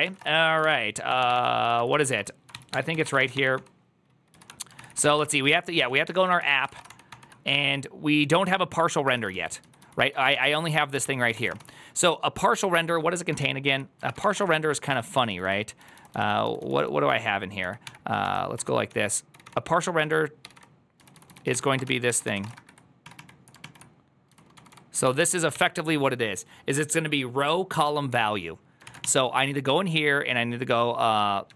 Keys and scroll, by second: 10.5 1, 19.3 g, 20.3 g, 21.6 1.